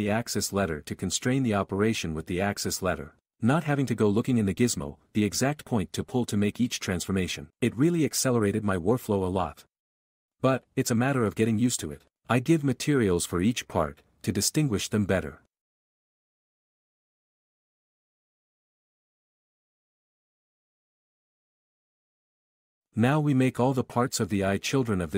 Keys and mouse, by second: 0.0-1.1 typing, 0.6 click, 4.3 g, 4.4 Escape, 4.9 g, 5.2 s, 5.7 s, 6.8 click, 11.1 click, 15.9 click, 16.8-19.8 typing.